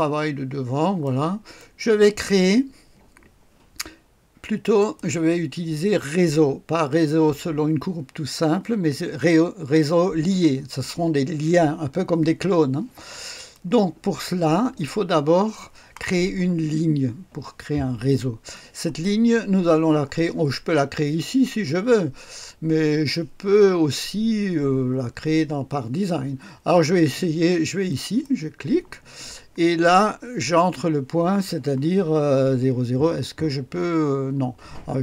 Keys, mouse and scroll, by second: 0.5-1.6 scroll down 1, 1.0 right click, 4.8 click, 13.4 click, 27.9 click.